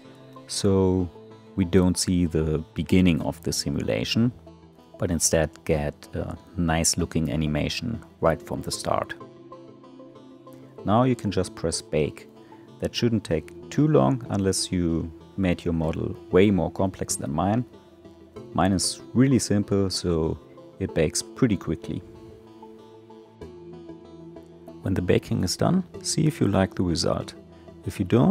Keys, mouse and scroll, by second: 11.3-24.4 drag, 27.8 click, 28.2 scroll down 2.